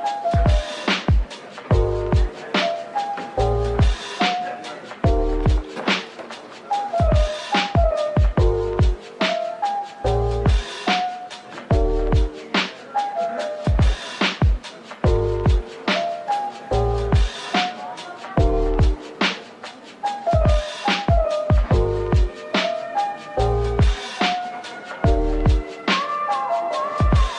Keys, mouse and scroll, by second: 0.1 Tab, 1.5 2, 3.4 alt+click, 4.4 typing, 5.0 alt+click, 6.5 alt+click, 7.3 typing, 9.5 alt+click, 10.2-12.0 typing, 10.5 Tab, 13.4 typing, 16.2 typing, 17.3-18.2 scroll up 1, 18.2-18.6 typing, 20.8-21.8 typing, 23.2-23.9 scroll down 1, 23.9 typing, 25.1 middle click, 25.6 Tab, 26.8 middle click.